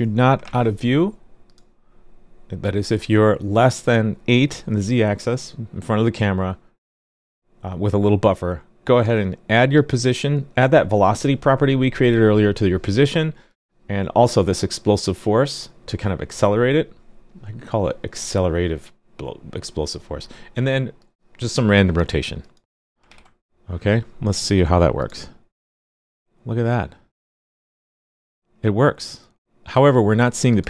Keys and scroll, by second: 23.0 super+s.